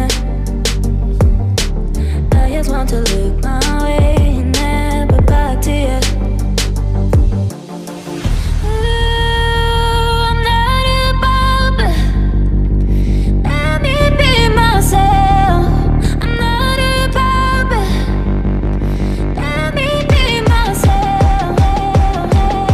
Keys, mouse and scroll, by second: 0.8 typing, 1.7 Tab, 2.1 typing, 4.0 typing, 6.9 right click, 10.5 ctrl+click, 16.0 F10.